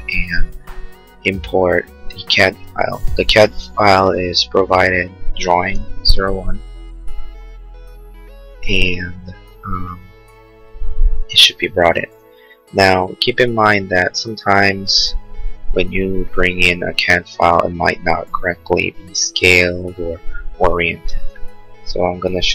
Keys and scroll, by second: 7.2 Return.